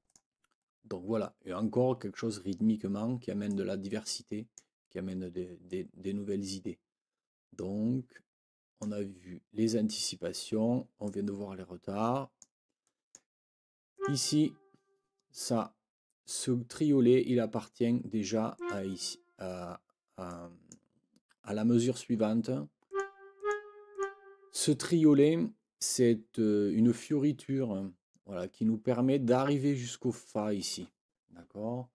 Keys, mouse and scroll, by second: 0.0 click, 3.5-4.7 drag, 5.7 click, 6.2-9.0 drag, 11.0-12.6 drag, 12.8 click, 13.9 click, 18.5 click, 20.3 click, 22.9 click, 23.4 click, 23.9 click.